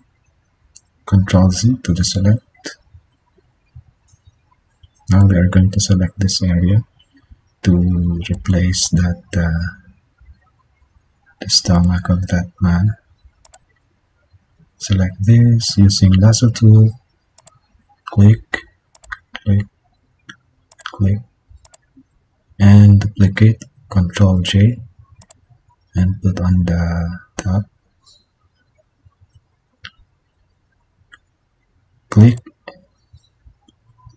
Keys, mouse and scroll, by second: 2.0 ctrl+z, 9.5 ctrl+=, 23.6 ctrl+j.